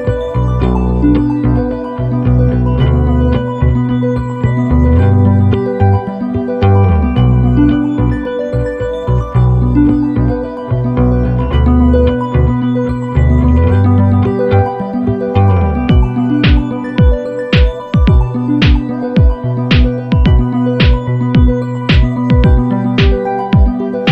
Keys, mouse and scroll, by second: 1.8 click, 2.8 click, 3.5 shift+click, 4.6 click, 5.9 click, 6.9 click, 7.8 click, 8.5 click, 9.2-9.9 ctrl+scroll up 4, 10.0 ctrl+click, 11.7 ctrl+d, 13.7 click, 15.5 click, 16.8 click, 21.5-23.1 drag, 23.8 ctrl+click.